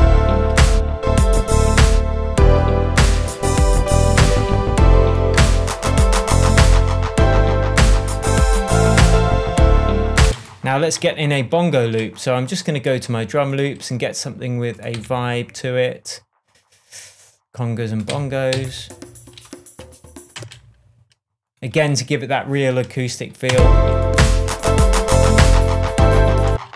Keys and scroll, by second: 10.2 space, 10.8 super+space, 10.9 super+t, 14.9 Right, 18.0 Right, 18.5 Down, 20.3 space, 23.5 space, 26.4 space.